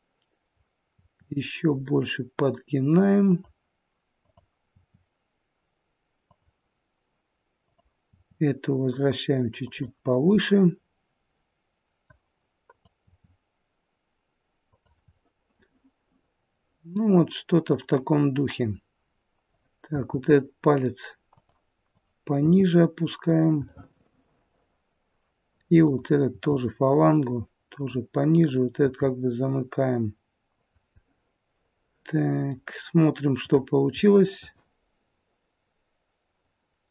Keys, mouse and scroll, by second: 0.8 r, 4.0 click, 4.7 r, 7.5 click, 8.1 r, 10.2 middle click, 12.5 click, 13.1 r, 15.0 middle click, 19.4 click, 19.9 r, 21.9 click, 22.4 r, 23.7 middle click, 25.8 click, 26.3 r, 28.3 click, 28.8 r, 31.0 middle click, 33.4 click, 34.0 middle click.